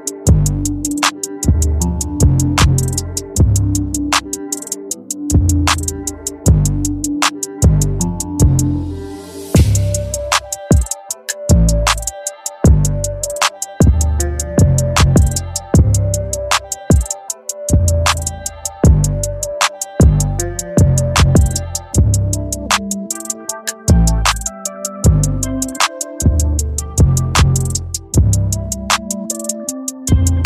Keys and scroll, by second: 5.7 space, 12.0 ctrl+z, 13.0 ctrl+z, 13.8 ctrl+z, 14.0 space, 14.9 space, 18.9 ctrl+z, 19.3 space, 20.4 space, 23.7 ctrl+z, 24.1 space, 27.6 ctrl+z, 27.9 space.